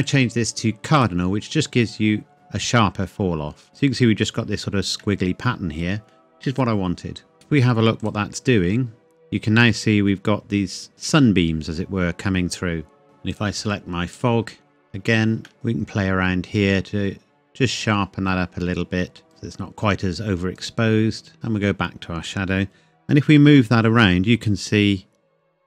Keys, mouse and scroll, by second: 0.0 click, 4.1 scroll down 1, 5.0 middle click, 5.1 scroll down 1, 6.1 scroll up 1, 7.3 KP_0, 8.0 click, 10.6-12.3 scroll up 1, 13.3 click, 14.3-15.1 scroll down 1, 15.3 shift+scroll down 1, 15.5 shift+middle click, 15.5-19.3 drag, 20.9 click, 23.5 g.